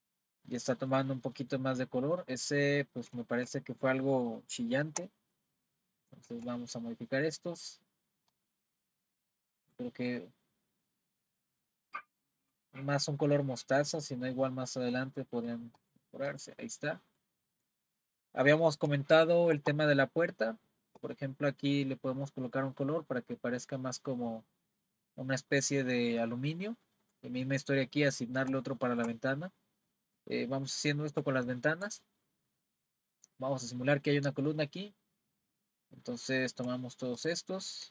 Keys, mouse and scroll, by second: 0.5-3.1 middle drag, 4.8 z, 6.3 z, 8.3 click, 15.8 click, 16.9-18.4 middle drag, 18.4 scroll up 3, 19.1-22.1 shift+middle drag, 22.2-25.9 middle drag, 26.5-26.9 scroll down 2, 26.9-30.5 middle drag, 30.5-31.4 scroll up 2, 31.4-35.1 shift+middle drag, 36.4 click, 37.2 shift+click.